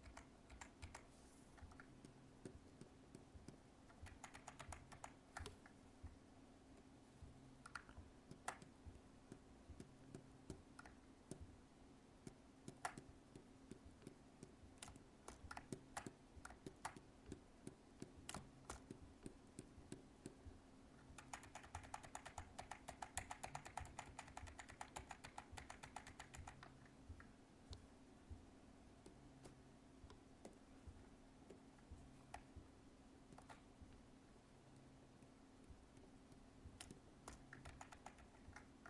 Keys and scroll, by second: 4.0 ctrl+z, 21.1 ctrl+z, 37.6 ctrl+z.